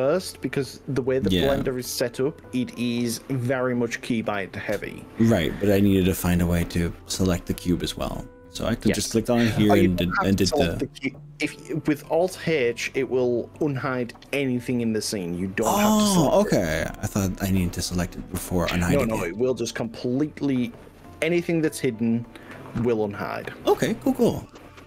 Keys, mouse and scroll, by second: 5.3 click, 11.7 middle click, 12.5 middle click.